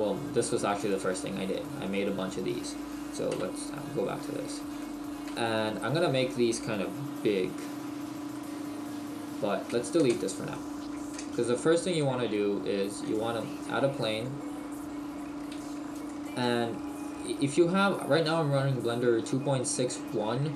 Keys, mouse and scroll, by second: 1.9 middle click, 3.4 KP_1, 4.8 shift+middle click, 4.8-5.4 scroll up 2, 8.4 middle click, 9.7 Delete, 10.5 middle click, 11.2 space, 13.6-14.5 scroll up 2, 14.0 middle click, 15.1-15.5 scroll down 2, 15.5 s, 16.0 click, 16.5 middle click.